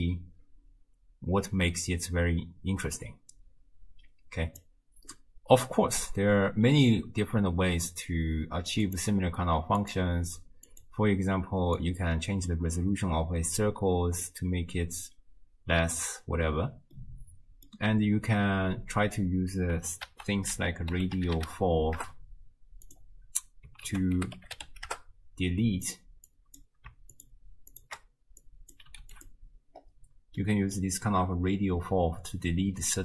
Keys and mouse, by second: 8.9 click, 9.8 click, 11.8-14.4 drag, 17.1 click, 20.1 ctrl+a, 23.9 ctrl+a, 26.3 click, 27.2 ctrl+shift+click, 27.8 ctrl+shift+click, 28.4 click, 30.4-30.8 drag, 32.5-33.0 d, 32.8 click.